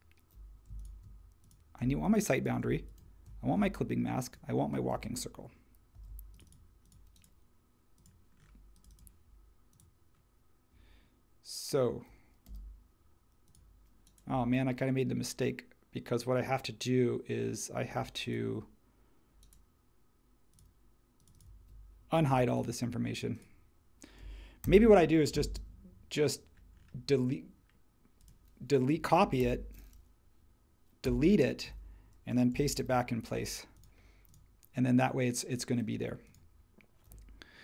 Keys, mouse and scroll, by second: 5.9 super+g, 12.4 n, 22.3 super+a, 24.6 super+c, 29.4 super+c, 31.0 BackSpace, 32.7 shift+v.